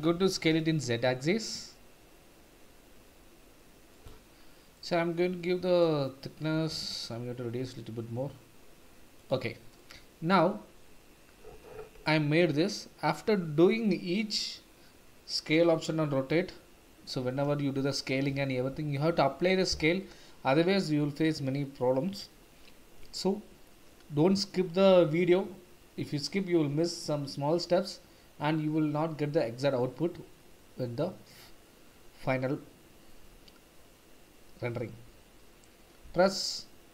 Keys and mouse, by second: 0.3 s, 0.5 z, 4.7-5.8 middle drag, 6.7 s, 6.9 z, 9.8-10.4 middle drag.